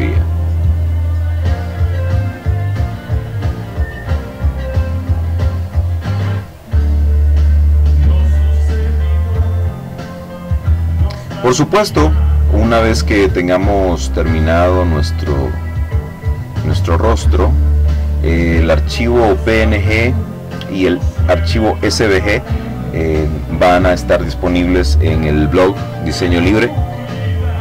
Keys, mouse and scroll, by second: 1.4 click, 2.7 click, 3.9 click, 5.0 click, 6.2 click, 8.1-9.7 drag, 9.9 click, 12.7 click, 14.4 click, 15.7 click, 18.5-20.7 drag, 27.4 ctrl+shift+f.